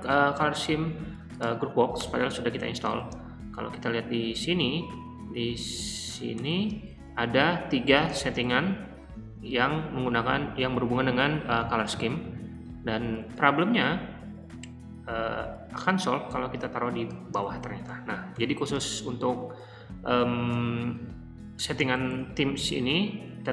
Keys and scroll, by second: 1.9 Return, 2.9-5.1 typing, 6.2-6.9 typing, 8.1-8.9 typing, 13.3 d, 14.6 j, 15.1 j, 16.3-18.3 typing, 18.9 Escape, 19.8-22.6 typing.